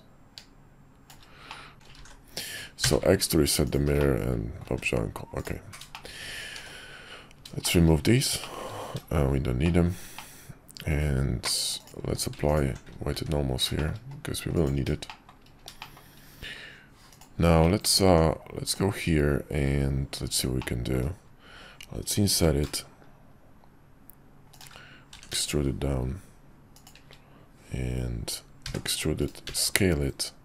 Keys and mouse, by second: 1.7 ctrl+z, 1.7 alt+x, 2.0 alt+x, 3.7-4.0 drag, 4.0-4.6 middle drag, 4.6 `, 5.3 click, 5.9 middle click, 6.6 shift+2, 7.6 shift+middle click, 8.4 middle click, 9.6 shift+middle click, 10.1-11.5 middle drag, 11.8 click, 12.1 q, 13.1 `, 13.7 shift+middle click, 14.5 click, 15.1 shift+middle drag, 15.8 shift+middle click, 17.1 click, 17.6 middle click, 18.0 Tab, 20.6 middle click, 22.3 i, 25.1 e, 28.6 e, 29.4 s.